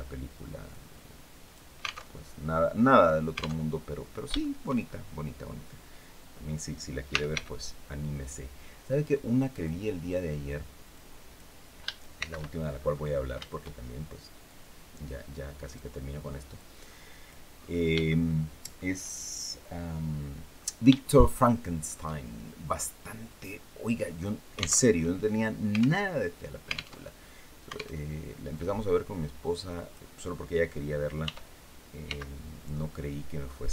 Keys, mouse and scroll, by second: 0.4-1.4 drag, 1.8 alt+Tab, 3.3 alt+Tab, 4.1 shift+click, 6.8 r, 7.0 x, 9.2 click, 10.6 click, 11.8 shift+c, 12.4-12.8 shift+scroll up 3, 14.1-15.6 drag, 16.2 click, 17.6 shift+scroll up 2, 17.7 shift+middle click, 20.3 scroll up 2, 20.8 shift+middle click, 22.5-24.1 drag, 24.5 alt+Tab, 25.7 alt+Tab, 26.7 alt+Tab, 27.7 alt+Tab, 28.2-29.8 drag, 30.9 r, 31.7 x.